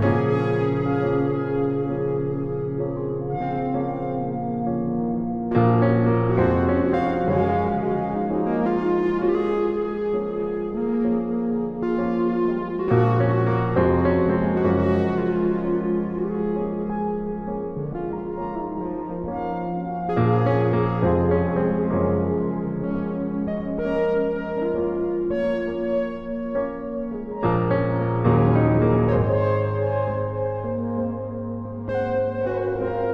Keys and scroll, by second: 0.8 v, 7.3 ctrl+t, 9.0 alt+shift+Return, 18.5 i, 25.0-26.2 typing.